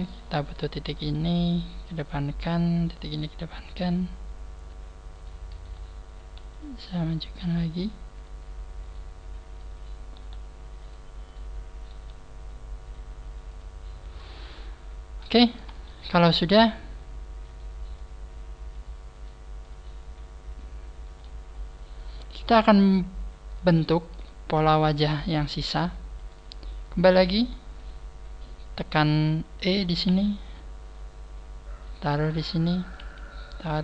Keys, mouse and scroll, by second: 0.3 click, 0.3 right click, 0.9 g, 2.7 click, 2.7 right click, 2.9 g, 5.3 right click, 5.5 shift+right click, 6.3 g, 8.9 click, 8.9 right click, 10.2 g, 11.3 click, 11.3 right click, 11.9 g, 13.9 click, 13.9 scroll down 3, 14.5-14.9 scroll down 2, 15.6 scroll down 1, 15.8 shift+middle click, 16.9-17.5 scroll up 1, 17.5 right click, 17.5 scroll up 2, 17.9 click, 19.1 right click, 19.6 click, 21.4 scroll down 4, 22.9 scroll up 5, 23.7 shift+middle click, 26.1 right click, 29.6 right click, 30.1 e, 32.8 click, 32.8 right click, 33.0 e.